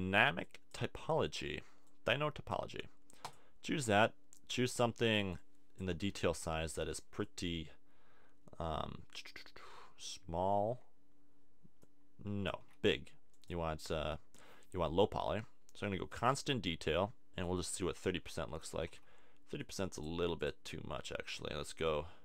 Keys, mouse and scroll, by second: 0.4-2.2 drag, 5.3 click, 6.3 super+z, 11.8-15.8 drag, 12.6 super+z, 17.4-19.2 drag, 18.9 super+z.